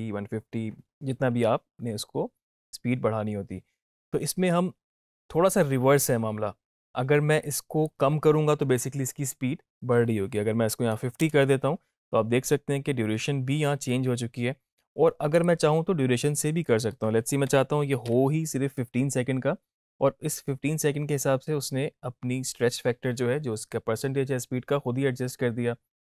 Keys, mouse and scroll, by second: 7.4-8.0 drag, 15.3 click.